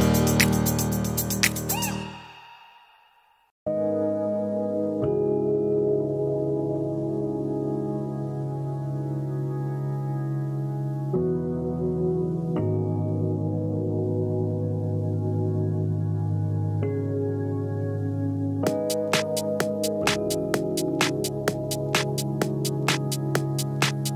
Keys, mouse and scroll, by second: 0.3 click, 0.6 click, 1.0 drag, 1.3 click, 1.6 click, 1.9 -, 2.2 drag, 2.4 click, 2.5 click, 2.9 click, 3.1 click, 3.5 Delete, 4.0 click, 4.5 click, 4.7 -, 4.8 click, 5.3 click, 5.8 click, 6.0 click, 6.2 click, 6.3 click, 6.9 click, 7.8 click, 8.1 click, 8.8 click, 8.9 click, 9.4 click, 9.9 click, 10.5-11.2 drag, 11.3 middle click, 11.5 click, 11.7 click, 11.8 click, 12.4 click, 12.8 click, 12.9 click, 13.6 click, 14.0 click, 14.1 drag, 14.2 middle click, 14.5 click, 14.7 click, 14.9 click, 15.6 click, 15.7 click, 15.9 middle click, 16.1 click, 16.3 click, 16.5 click, 16.8 click, 17.0 click, 17.5 click, 17.7 click, 17.8 click, 18.0 ctrl+d, 18.1 shift+click, 18.3 click, 18.4 click, 18.7 click, 18.8 click, 19.1 click, 20.2 click, 20.5 click, 20.6 click, 21.2 click, 21.3 -, 21.4 middle click, 21.4-21.9 scroll down 2, 21.8 middle drag, 22.0 click, 22.3 click, 22.4 click, 23.0 click, 23.1 click, 23.4 click, 23.8 click, 24.0 click.